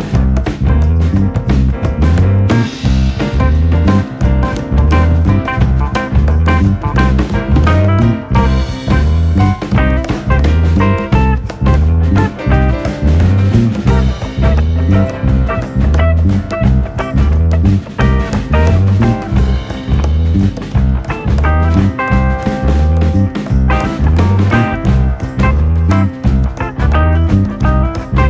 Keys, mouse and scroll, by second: 0.0 click, 0.5 click, 1.3 Tab, 1.4 click, 1.9 g, 2.9-3.3 shift+middle drag, 3.3 drag, 3.7 g, 4.4-5.3 drag, 5.5-5.9 shift+middle drag, 5.9 drag, 6.1-6.7 shift+middle drag, 6.7 r, 7.5 click, 8.5 click, 8.7-9.8 scroll down 4, 8.9-9.2 middle drag, 9.4 middle drag, 9.8-10.1 shift+middle drag, 10.1 scroll up 6, 10.3-10.9 middle drag, 10.9 drag, 11.1-12.0 middle drag, 12.0 scroll up 1, 12.1-12.6 middle drag, 12.6 Tab, 13.0-14.0 middle drag, 15.9 alt+m, 17.1 alt+n, 18.7 Tab, 18.9 click, 19.0 scroll down 2, 19.2 shift+middle click, 19.6 click, 20.5-20.8 shift+middle drag, 20.8 shift+click, 21.3 Tab, 22.2 a, 23.0 alt+n, 24.0 Tab, 24.3 click, 24.5 scroll down 2, 24.6-25.5 middle drag, 25.5 scroll down 1, 25.6-26.1 shift+middle drag, 26.1 scroll down 1, 26.2-27.6 shift+middle drag, 27.7 ctrl+s.